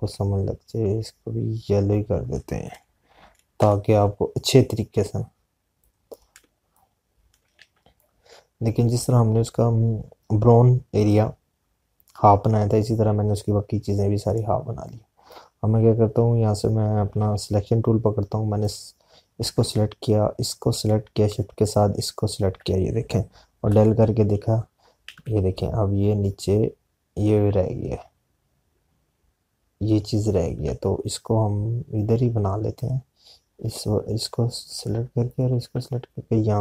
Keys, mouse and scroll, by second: 5.2 i, 5.5 click, 17.6 click, 19.6 click, 24.7 Delete, 26.3 ctrl+z, 35.9 click, 36.2 shift+click.